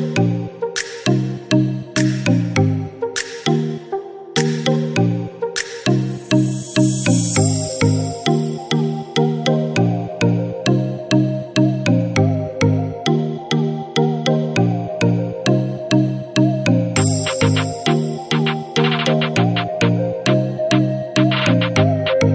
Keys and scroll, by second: 1.6 ctrl+=, 2.6 ctrl+=, 3.7 ctrl+=, 9.8 0.